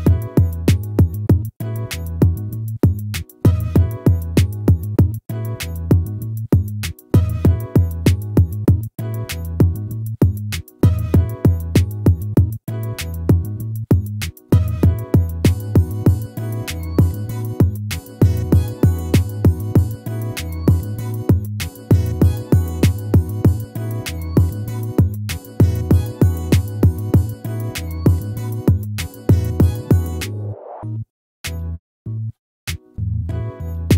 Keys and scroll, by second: 9.4 ctrl+-.